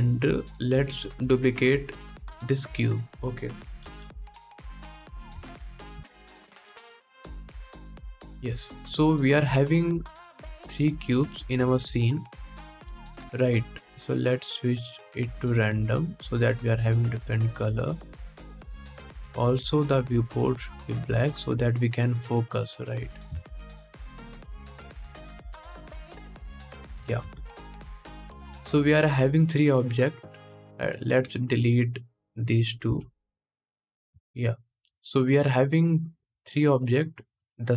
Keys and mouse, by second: 0.9-4.4 middle drag, 3.5 shift+d, 4.4-11.3 drag, 6.1 shift+d, 10.4-11.3 middle drag, 12.1-13.9 middle drag, 13.9-22.8 drag, 22.8-25.3 shift+middle drag, 25.3-26.7 drag, 26.7-28.5 ctrl+middle drag, 26.9 ctrl+s, 28.5-36.9 drag, 31.3 c, 32.5 x, 33.9 ctrl+s, 37.2-37.7 drag.